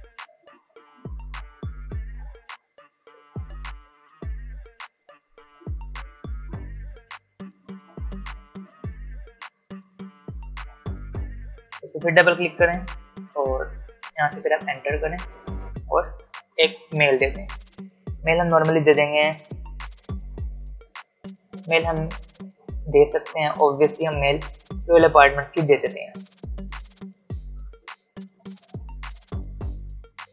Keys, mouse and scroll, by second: 0.0-1.3 typing, 3.3 ,, 5.5-8.5 typing, 11.5 click, 14.4 Return, 30.1 r.